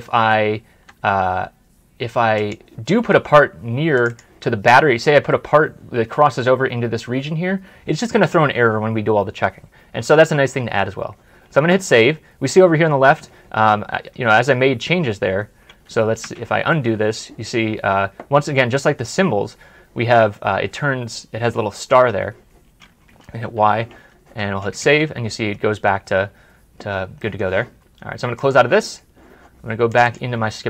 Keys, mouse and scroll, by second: 3.9 double click, 10.4 double click, 10.9 ctrl+s, 14.5 ctrl+s, 15.2-15.7 scroll up 1, 15.8 scroll up 1, 16.1 ctrl+z, 16.7 middle click, 23.3 middle click, 23.8 ctrl+y, 24.4 ctrl+y, 25.0 ctrl+s, 27.1 middle click, 29.9 middle click, 30.0 double click, 30.5 scroll up 1.